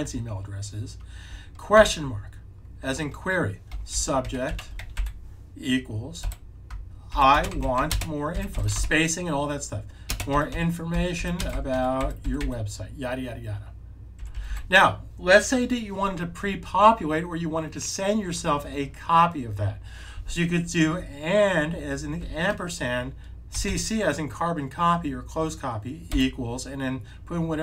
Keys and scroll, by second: 1.4-2.2 typing, 3.6-4.9 typing, 6.1-8.6 typing, 10.2-12.3 typing, 14.1 typing, 22.1 typing, 23.4 typing, 26.0 =.